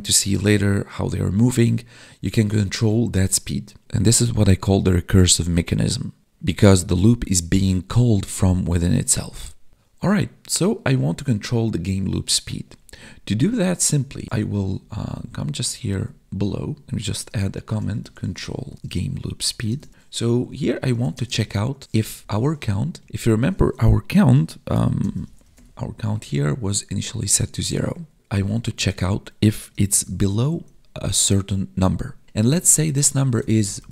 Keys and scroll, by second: 14.7 ctrl+Down, 15.5 Up, 15.9 Tab, 17.1 space, 18.7 space, 19.6 space, 19.9 ctrl+s, 21.1 space, 22.9 Right, 23.0 Left, 24.6 ctrl+f, 27.8 Escape, 30.0 space.